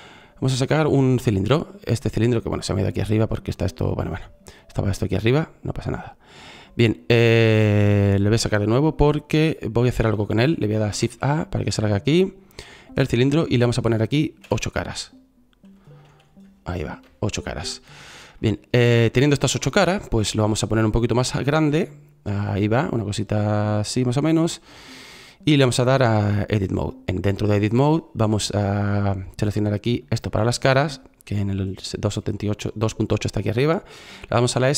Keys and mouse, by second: 9.3 Delete, 10.8 shift+a, 34.4 s.